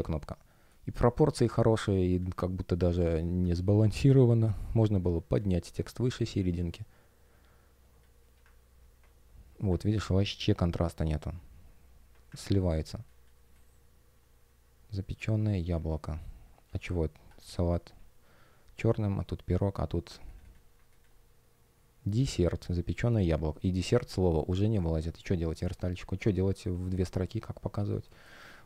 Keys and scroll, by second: 4.7 space, 12.7 space, 28.1 space.